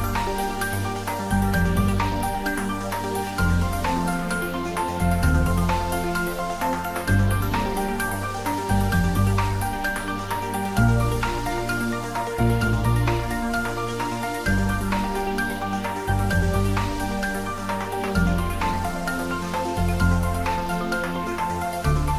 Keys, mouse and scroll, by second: 1.1-1.7 scroll up 1, 2.0-4.0 scroll down 1, 18.4 click.